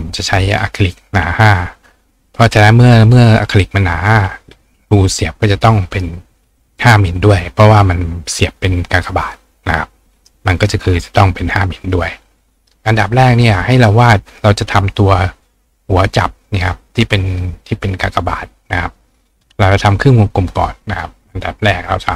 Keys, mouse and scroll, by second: 10.2 right click, 11.9 click, 20.9 click.